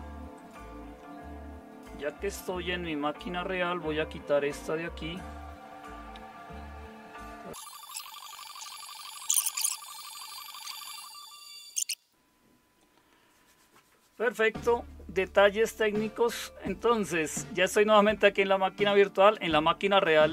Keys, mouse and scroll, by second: 7.8-11.0 typing, 11.2 ctrl+x, 11.5 alt+super+r, 12.1 super+0.